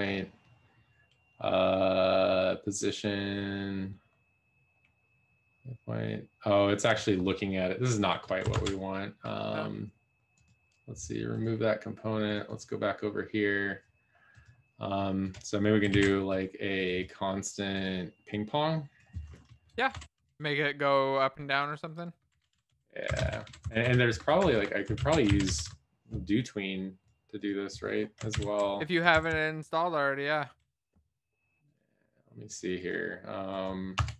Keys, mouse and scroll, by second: 24.0 Return, 24.0 BackSpace, 29.5 Down.